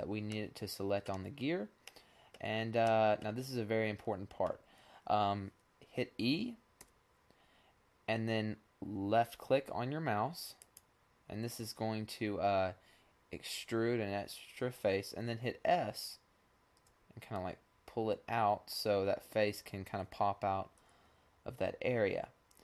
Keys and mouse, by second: 0.9-4.8 middle drag, 6.3 e, 15.9 s.